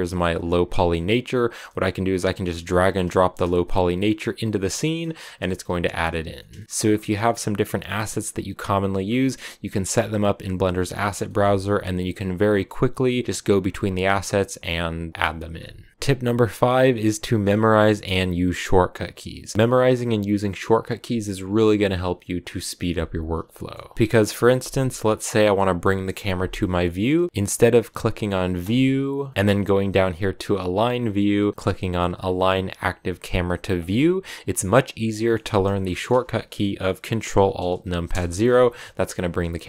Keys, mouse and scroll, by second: 3.1-3.8 scroll up 2, 3.8-4.4 scroll up 1, 4.4 click, 4.6 middle click, 5.1 s, 5.5 g, 6.2 shift+middle click, 6.5 scroll up 2, 6.6 shift+middle click, 6.9-10.9 drag, 10.9 scroll down 2, 11.0-15.6 middle drag, 15.6 click, 15.9-26.9 middle drag, 34.5-36.9 middle drag, 37.9 ctrl+alt+KP_0.